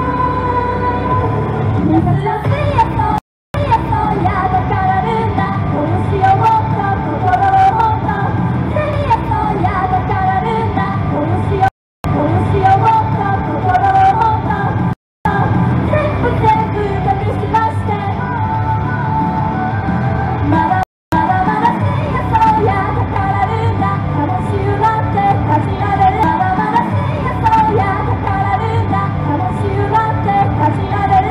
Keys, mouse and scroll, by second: 3.2 right click, 3.4 Return, 3.6 space, 9.0 space, 11.7 right click, 11.9 Return, 12.1 space, 14.9 right click, 15.1 Return, 15.3 space, 20.9 right click, 21.0 Return, 21.2 space, 26.2 space.